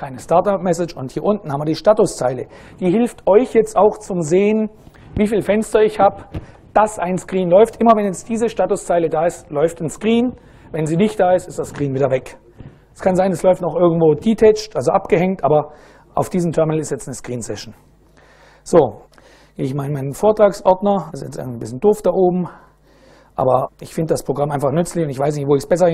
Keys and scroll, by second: 18.8-20.8 typing, 21.1 ctrl+u, 21.5 ctrl+Return, 23.0 y.